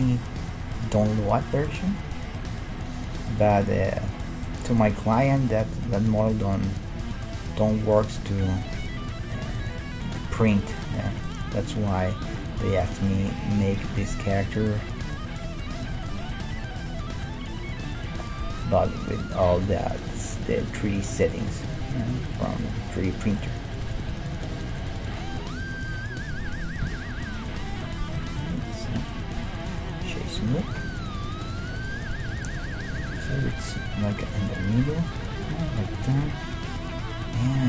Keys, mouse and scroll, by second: 0.2-1.2 right drag, 1.3-3.1 right drag, 1.6 g, 2.4-6.5 middle drag, 3.4 g, 4.9 g, 5.7-7.9 right drag, 6.3 g, 7.0-12.1 middle drag, 7.9 g, 9.1-12.1 right drag, 10.1 g, 11.5 g, 14.5 g, 16.1 g, 17.2 s, 19.5 g, 21.7-24.8 drag, 22.2 g, 23.4 g, 25.1 middle click, 25.5 g, 26.8 KP_1, 28.2 a, 28.5 a, 29.0 w, 30.4 a, 32.4 KP_1, 35.4-37.1 right drag, 36.8-37.6 middle drag, 37.3-37.6 right drag.